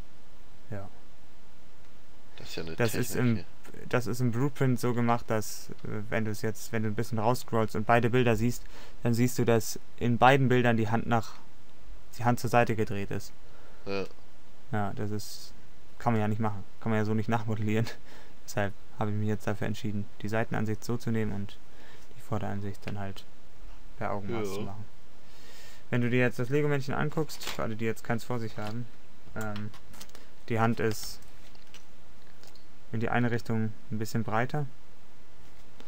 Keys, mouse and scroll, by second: 4.9 middle click, 5.1 middle click, 16.7 click, 16.9 middle click, 18.2 middle click, 18.8 middle click, 20.4-21.6 middle drag, 22.0 middle click, 22.5 middle click, 35.4 middle click.